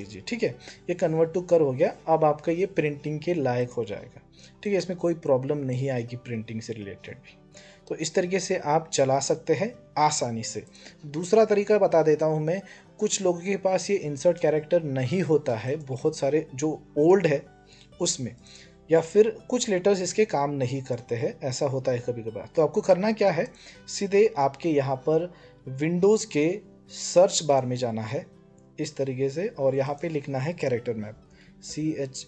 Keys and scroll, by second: 30.9-32.2 typing.